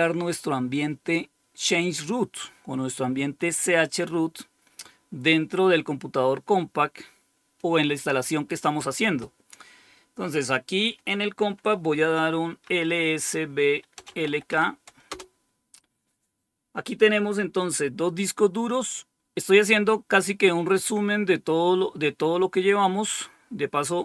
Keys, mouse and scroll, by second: 10.3 click, 12.5-14.9 typing, 15.0 Return.